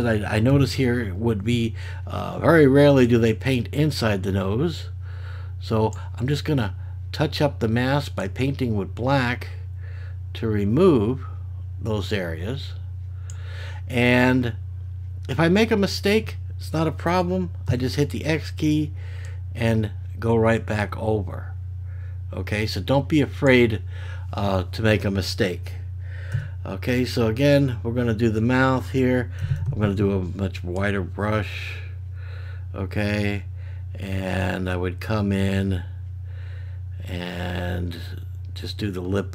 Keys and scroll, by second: 0.5 [, 17.7 x, 26.3 x, 29.4 ].